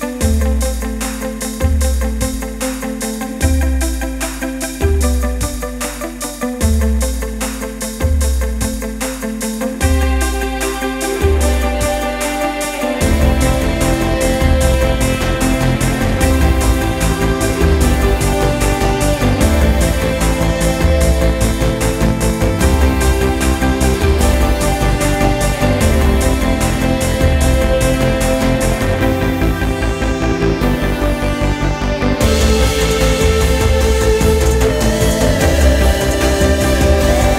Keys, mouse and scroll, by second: 3.5 click, 6.6 g, 11.4 shift+d, 15.9 click, 19.2 click, 24.3-24.8 drag, 26.6 click, 28.3-29.9 drag, 29.9 KP_0, 33.8 click, 36.2-37.3 drag.